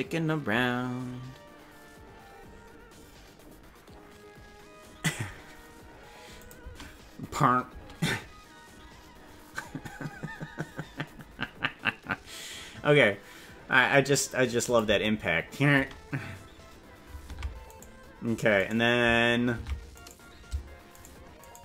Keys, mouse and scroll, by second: 6.4 click, 6.7 space, 7.7 space, 14.6 click, 14.8 space, 15.8 space, 17.4 ctrl+Tab, 17.8 right click, 18.8 right click, 19.6 ctrl+Tab, 20.1 right click, 21.1 shift+right click, 21.5 right click.